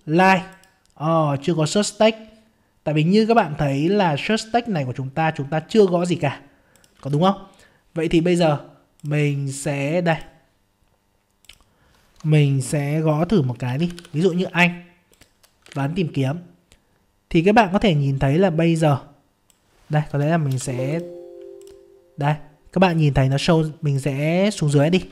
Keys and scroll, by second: 15.7 alt+Tab.